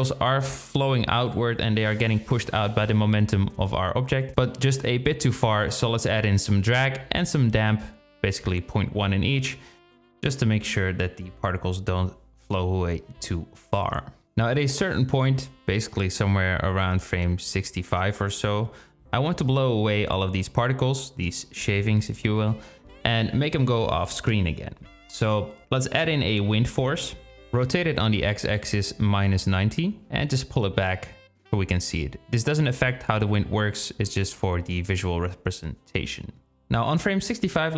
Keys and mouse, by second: 3.9 space, 6.3-7.5 drag, 7.9 click, 8.9 click, 9.7 space, 14.7 space, 15.6-19.0 drag, 23.4 shift+a, 27.0 r, 30.2 g, 34.4 click, 36.3-37.7 drag.